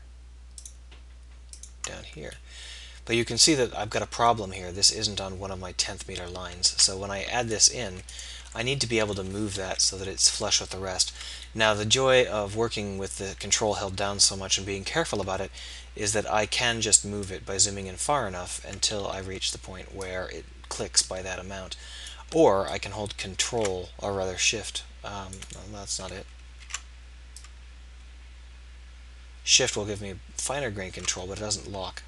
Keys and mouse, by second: 7.4-9.6 drag, 9.6 KP_3, 12.8-17.2 middle drag, 19.0-22.7 middle drag, 26.1 ctrl+z, 26.4 ctrl+z.